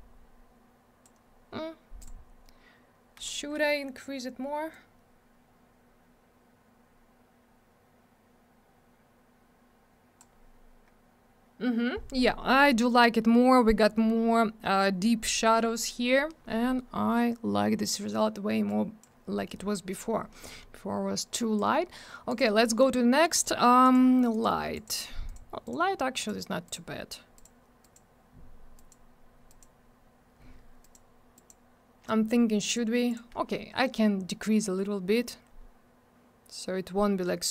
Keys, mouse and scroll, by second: 2.0 click, 4.7 click, 18.7 click, 21.4 click, 21.5 click, 22.3 click, 22.4 click, 23.3 click, 23.4 click, 23.8 click, 23.9 click, 24.3 click, 24.4 click, 24.7 click, 24.8 double click, 25.3 click, 25.3 click, 25.6 click, 25.7 double click, 26.2 click, 26.2 click, 26.7 click, 26.7 double click, 27.4 click, 27.4 click, 27.8 click, 27.9 click, 28.8 click, 28.9 click, 29.5 click, 29.6 click, 30.8 click, 30.9 click, 31.3 click, 31.5 click, 32.6 click, 32.7 click, 33.1 click, 33.1 double click, 33.9 click.